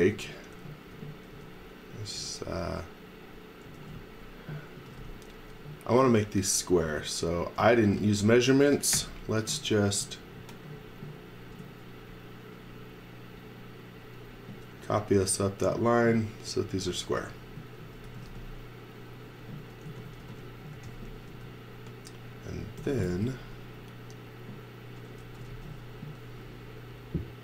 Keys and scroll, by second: 0.0-2.2 typing, 3.7-5.5 typing, 6.9 space, 7.6 z, 8.0 x, 9.0 r, 14.7 b, 17.3-18.8 typing, 19.9 z, 20.2 x, 20.7 x, 21.3 space, 22.8 m, 25.2 x, 25.5 v.